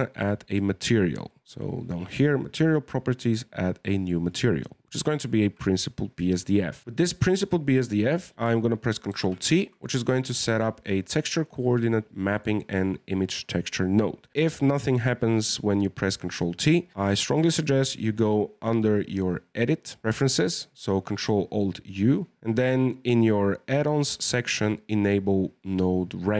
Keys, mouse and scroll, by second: 2.7-3.4 drag, 3.4-3.8 scroll up 1, 3.8 middle click, 4.3 drag, 4.6-6.8 scroll up 1, 6.8 click, 9.1 ctrl+t, 9.5-10.3 middle drag, 10.3 click, 11.0 middle click, 11.9-12.3 scroll down 1, 12.3 middle click, 12.4-13.1 scroll up 1, 13.1-14.5 scroll up 1, 20.0-22.0 drag.